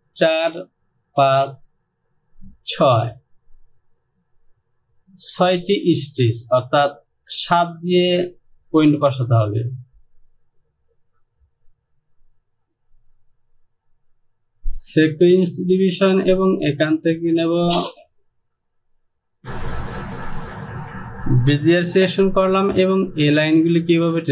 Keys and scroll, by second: 19.4 Return.